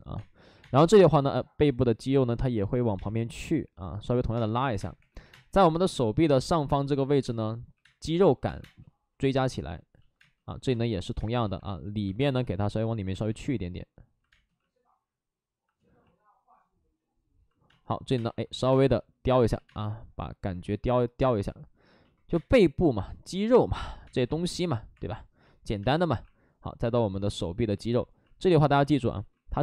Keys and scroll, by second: 0.1 space, 0.5 2, 2.9 space, 4.6 3, 4.9 3, 5.2 3, 5.2 space, 6.4 ctrl+z, 7.2-8.5 typing, 11.3 space, 11.3 2, 11.9 ctrl+z, 12.1 space, 17.6-19.6 typing, 19.5 ctrl+z, 21.3 ctrl+z, 22.2 2, 24.2 ctrl+z, 24.9 3, 25.7 space, 26.0 2, 29.1 ctrl+z.